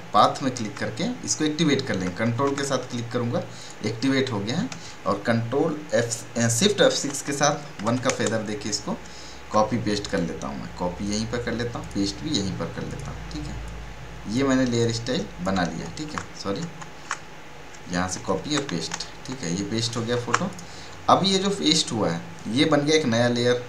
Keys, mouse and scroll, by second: 3.5 ctrl+click, 4.0 ctrl+scroll down 1, 6.1 shift+F6, 10.0 click, 10.4-15.8 drag, 15.8 ctrl+alt+z, 16.8 ctrl+alt+z, 18.1 ctrl+c, 19.2 click, 20.1 ctrl+alt+z, 20.5 click.